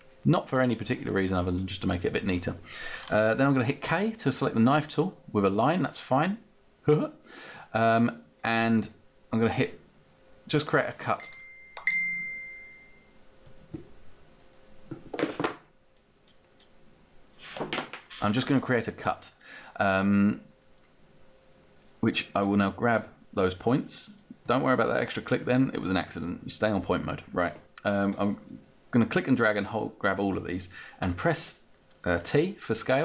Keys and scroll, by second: 3.9 k, 30.7 t.